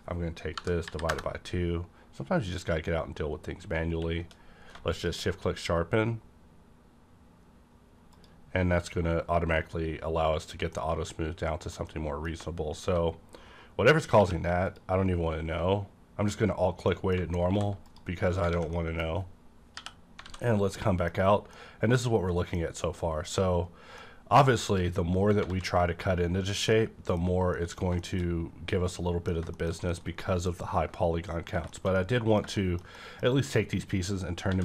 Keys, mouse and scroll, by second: 0.5 KP_Divide, 0.8 KP_2, 1.1 KP_Enter, 3.0 scroll down 1, 3.4-3.9 scroll up 1, 3.9 q, 4.9 click, 8.1 click, 8.6-9.3 scroll down 1, 9.3-10.5 scroll down 1, 10.7 middle click, 11.9 middle click, 14.2 q, 14.6 alt+click, 16.5-16.9 scroll down 1, 16.9 middle click, 17.4 alt+v, 17.8 click, 18.3 scroll down 1, 18.5 alt+a, 18.7 middle click, 19.7 /, 20.2 a, 20.4 scroll down 1, 20.7 middle click, 21.1-21.5 scroll up 1, 21.5-23.0 middle drag, 22.6-23.0 scroll up 1, 23.7 scroll down 1, 24.0 middle click, 24.7 click, 25.1 scroll down 1, 25.4 alt+a, 26.3 scroll down 1, 26.7 middle click, 28.9 shift+middle click, 29.5 middle click, 29.9-31.6 middle drag, 31.1-31.6 scroll down 1, 31.7 shift+middle click, 31.9 shift+middle click, 32.5 middle click, 32.9-34.5 middle drag, 34.5 a.